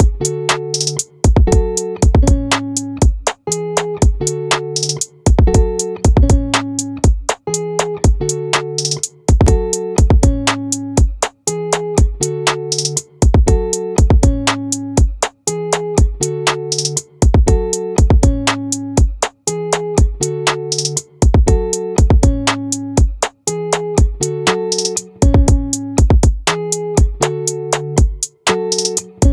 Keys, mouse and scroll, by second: 1.7 ctrl+r, 21.0 middle click, 21.3-22.4 drag, 22.4 middle click, 22.8-25.2 drag, 25.2 middle click, 27.8-29.3 middle drag.